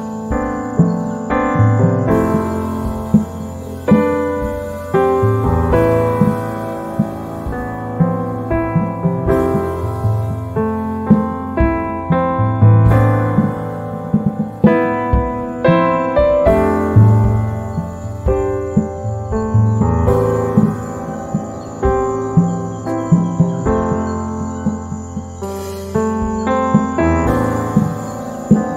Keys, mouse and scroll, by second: 16.1 right click, 17.5-19.8 drag, 19.8 ctrl+z, 21.4-24.9 drag, 24.9 right click, 25.7-28.7 drag.